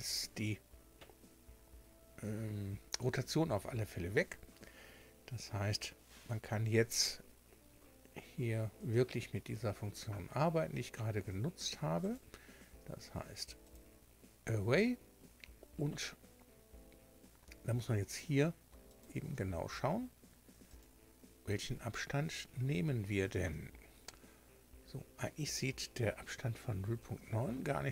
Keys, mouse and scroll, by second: 12.0 click, 13.6 click, 18.1 click, 18.9 click, 20.7 click, 22.1-22.6 scroll up 2.